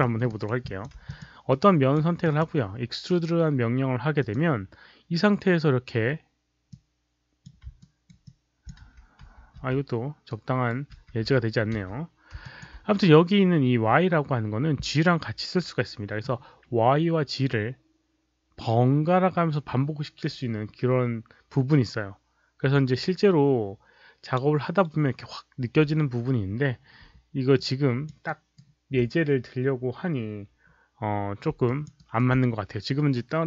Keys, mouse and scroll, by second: 0.2 alt+right click, 0.5 alt+click, 1.0 click, 1.4-1.8 right drag, 2.1 click, 4.1 click, 6.6-7.4 drag, 7.7 alt+right click, 8.2 alt+click, 8.7 z, 9.5 z, 10.2-10.6 right drag, 10.9 z, 11.1 z, 11.7 z, 12.3 alt+click, 27.5 alt+click, 28.2 alt+right click, 31.6 alt+click, 31.9 alt+right click.